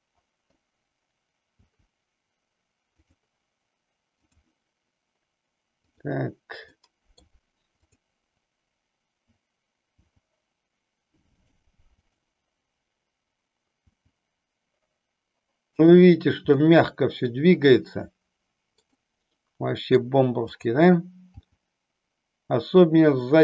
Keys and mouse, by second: 1.6 g, 3.1 click, 4.1 click, 5.9 click, 6.9 middle click, 7.7 click, 10.0 g, 11.5 click, 12.0 click, 13.9 g, 16.6-18.9 middle drag, 20.5 click, 22.4 g.